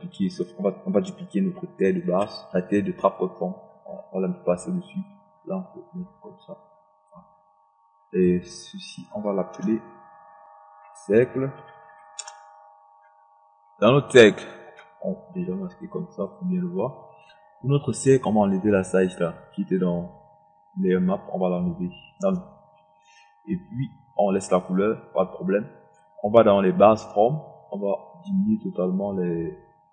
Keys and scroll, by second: 2.1 ctrl+d, 9.5 Return.